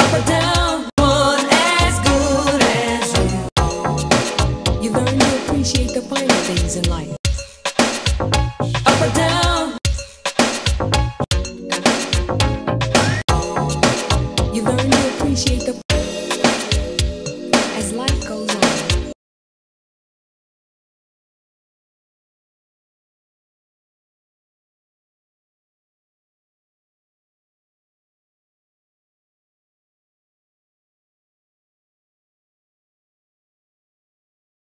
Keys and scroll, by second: 0.9 4, 3.4 4, 7.1 4, 9.8 4, 11.2 4, 13.2 4, 15.8 4, 19.1 space, 33.2 3.